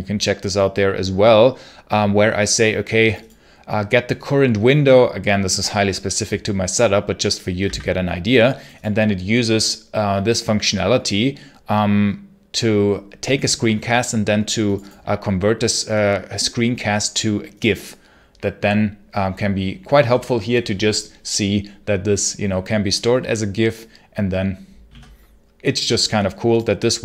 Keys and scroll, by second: 7.5 d.